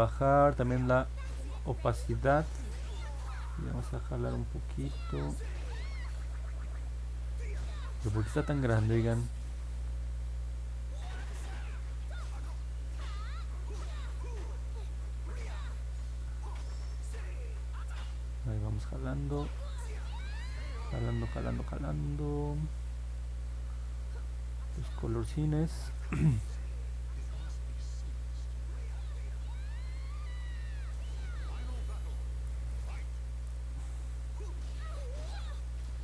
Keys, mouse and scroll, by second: 5.8 ctrl+z, 13.1-14.4 drag, 15.9 click, 17.7 click, 18.5 click, 20.0 click, 23.7 click, 24.4 click, 25.5 click, 25.8 click, 26.1 click, 26.7 click, 27.0 click, 27.3 click, 27.6 click, 27.9 click, 28.2 click, 28.5 click, 28.8 click, 29.0 click, 29.3 click, 29.6 click, 29.8 click, 30.1 click, 33.6 click, 34.0 click, 34.3 click, 34.5 click, 34.8 click, 35.1 click, 35.3 click, 35.6 click, 35.9 click.